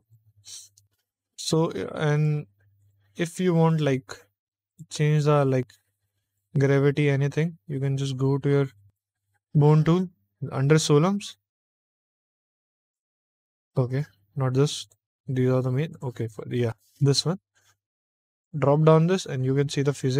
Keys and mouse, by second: 2.1 click, 2.7 click, 3.6 click, 4.3 click, 4.6 click, 6.2 click, 8.8 click, 12.7 click, 14.7 click, 15.8 click, 18.2 click.